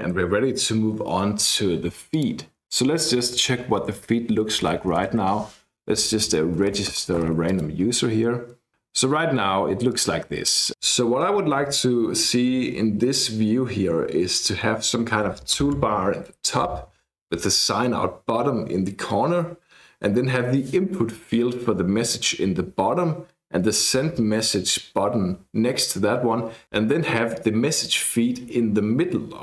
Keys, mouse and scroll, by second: 2.1 click, 2.6 click, 3.0-8.0 typing, 6.3 Tab, 7.5 click, 9.9 click.